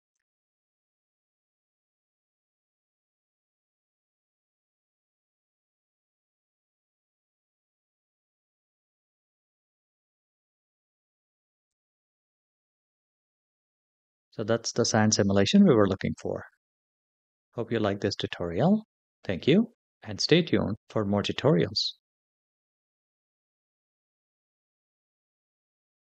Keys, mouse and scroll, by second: 0.0 click, 1.5 click, 2.9 click, 4.3 click, 5.3 click, 6.6 click, 8.7 click, 10.0 click, 11.5 click, 13.3 click.